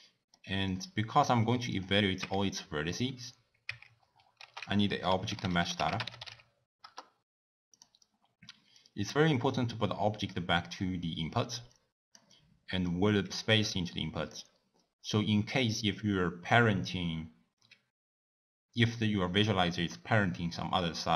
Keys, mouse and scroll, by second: 0.0 middle click, 0.7 click, 1.7 click, 2.2 Tab, 3.6 Tab, 4.4 ctrl+a, 8.8-12.9 drag.